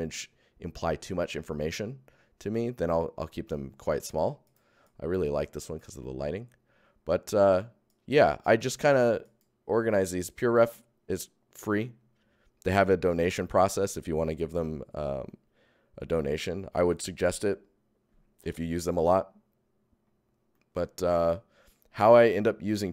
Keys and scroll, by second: 2.9 Tab, 3.5 Tab, 4.7 ctrl+alt+Tab, 4.8 ctrl+alt+Tab, 15.2 Tab, 16.0 Tab.